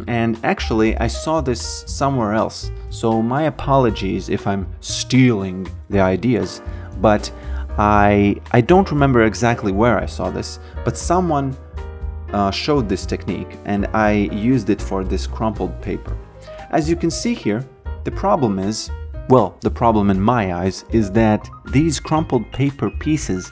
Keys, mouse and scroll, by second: 1.8 click, 6.1 alt+right click, 6.8 alt+click, 7.6 alt+right click, 8.2 alt+middle click, 8.6 alt+right click, 10.7 click, 13.3 click, 15.7 alt+right click, 17.1 alt+middle click, 17.6 alt+click, 18.5 alt+middle click.